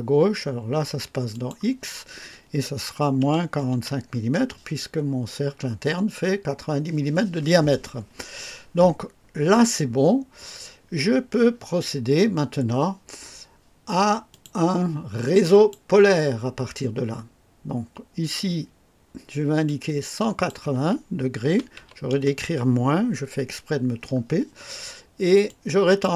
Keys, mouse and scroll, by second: 1.3 click, 3.2 -, 3.4 -, 3.6 KP_4, 3.8 KP_5, 8.6-9.0 scroll down 2, 14.3 click, 15.4 click, 19.6 click, 21.4 KP_1, 21.6 KP_1, 21.7 KP_8, 22.1 KP_0, 25.4 click.